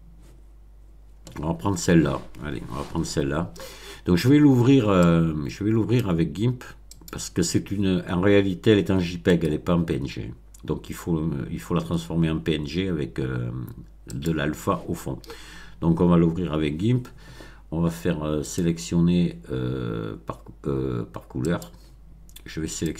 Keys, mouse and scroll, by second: 5.0 click, 6.9 click, 9.2 right click, 14.1 click, 18.4 click, 21.4 click, 22.7 click.